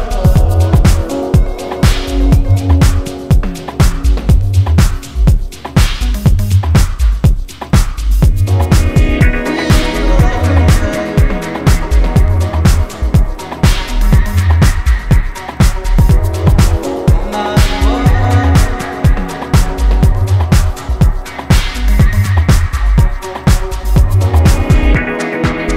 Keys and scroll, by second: 25.4 ctrl+KP_Add, 25.6 ctrl+KP_Add.